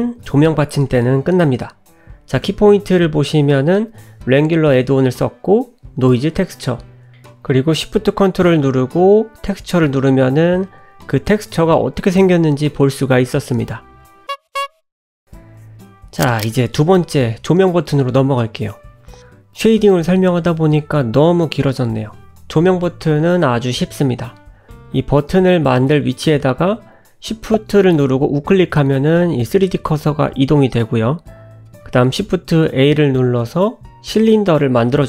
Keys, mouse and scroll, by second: 30.1 click, 30.1 n, 30.3 shift+a.